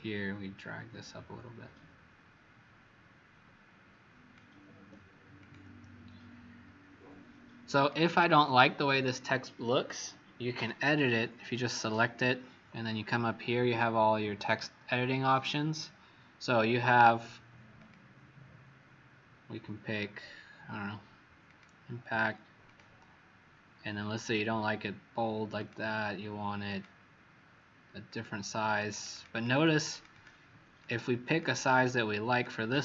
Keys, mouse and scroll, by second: 7.7 click, 10.7 click, 11.7 click, 28.6 click, 28.8 click, 29.0 click, 29.3 click, 29.5 click, 29.6 click, 29.8 click, 30.0 click, 30.7 click, 31.2 click, 32.2 click.